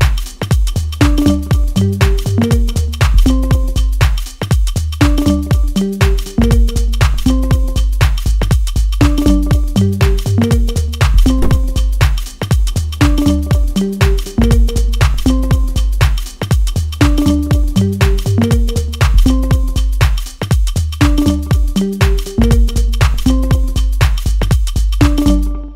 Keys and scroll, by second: 22.3 l.